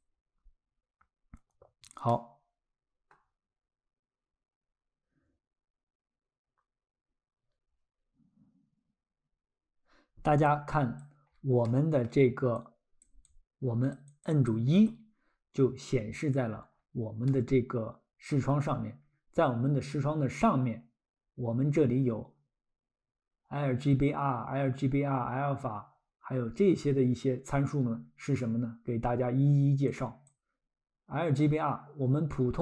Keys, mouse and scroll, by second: 2.1 middle click, 10.5 click, 11.3-11.7 scroll, 11.7 middle click, 12.6 click, 13.3 click, 14.1 click, 14.5 click, 15.6-16.4 scroll, 17.3 middle click, 17.7-18.1 scroll, 19.0 scroll, 29.9 click.